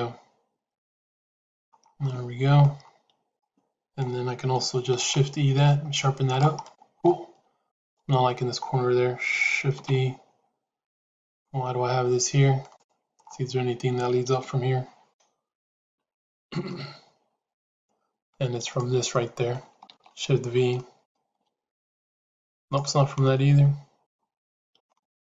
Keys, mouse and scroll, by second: 2.0 middle click, 3.3 middle click, 4.8 shift+e, 6.5 middle click, 7.5 click, 9.7 shift+e, 12.5 click, 15.9 shift+z, 16.6-18.1 middle drag, 18.6 click, 19.1 middle click, 20.1 shift+z, 20.6 middle click, 21.3 g, 22.8-23.9 middle drag, 24.4 middle click, 24.8-25.3 middle drag.